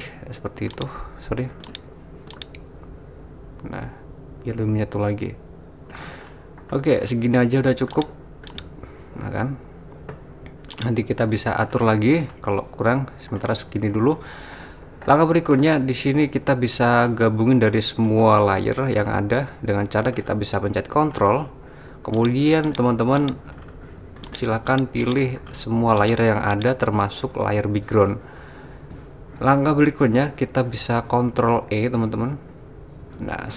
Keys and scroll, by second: 32.3 super+e.